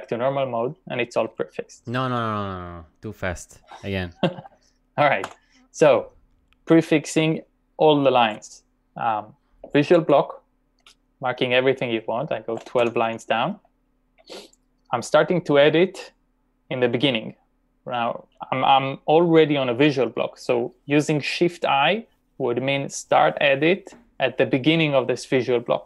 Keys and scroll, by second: 5.3 u, 9.9 ctrl+v, 12.5-13.5 typing.